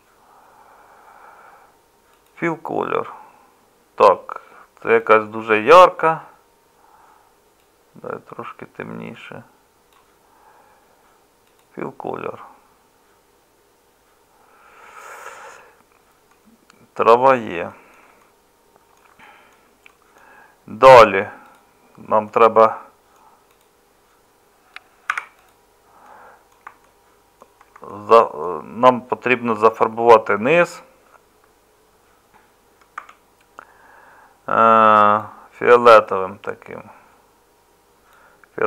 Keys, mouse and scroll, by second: 16.8 middle click, 20.9 Tab, 25.1 3, 30.2-33.0 middle drag, 33.0 Tab.